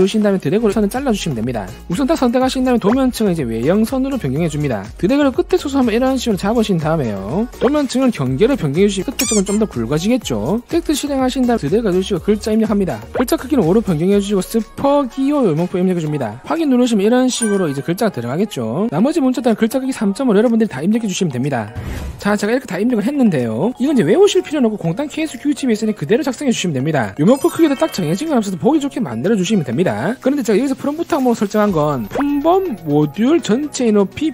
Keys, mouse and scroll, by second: 0.7 click, 2.1 click, 3.3 click, 4.6 click, 5.1 click, 5.6 click, 6.9 shift+click, 8.5 click, 10.9 t, 11.7-12.8 drag, 13.1 click, 13.5 click, 14.3 click, 14.6 click, 14.8-16.3 typing, 16.8 click, 32.2 click, 33.1 click, 34.1 click.